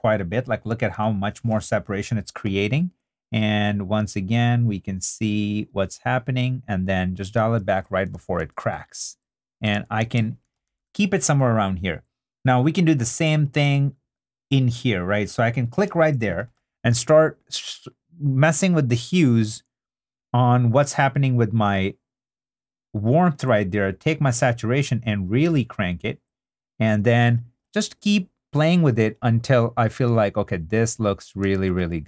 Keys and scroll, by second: 8.1 super+d, 9.7 super+d, 31.5 super+d.